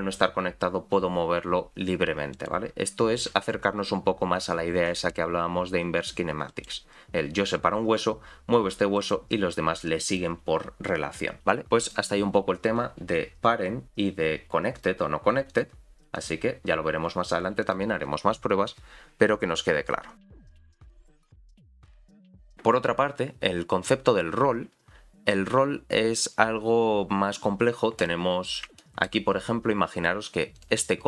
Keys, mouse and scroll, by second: 10.1 click, 11.6 click, 12.8-14.7 scroll up 2, 14.7 click, 14.7 scroll up 3, 15.5 click, 16.1 click, 16.6-17.5 scroll down 1, 17.5 scroll down 3, 17.6 click, 28.0 click, 28.8 shift+middle click, 30.6 click.